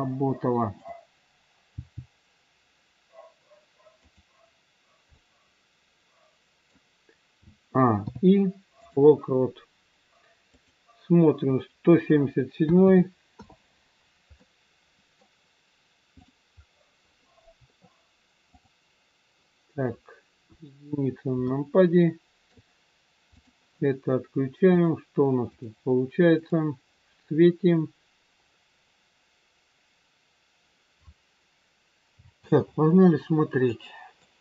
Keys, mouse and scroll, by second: 0.7 click, 0.7-1.5 scroll down 2, 1.7 g, 5.1 middle click, 7.3 a, 7.8 i, 10.5 click, 12.9 KP_7, 14.0-14.4 scroll down 3, 14.4 middle click, 16.2 click, 16.5-16.8 scroll up 5, 18.5 click, 20.4 KP_1, 21.0-21.4 scroll up 1, 21.4 shift+middle click, 23.4 click, 24.7 click, 26.5 click, 28.5-29.3 scroll up 1, 32.4 space, 32.9 scroll down 3, 33.6 middle click.